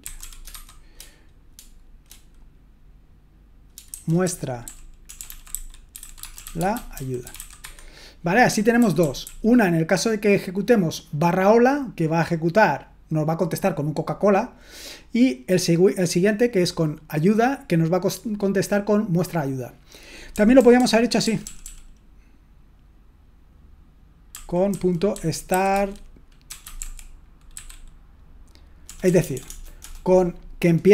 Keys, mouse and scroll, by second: 0.2-1.0 typing, 3.6-9.2 typing, 20.5-22.1 typing, 24.9-27.5 typing, 29.0 BackSpace, 29.2 BackSpace, 29.3 BackSpace.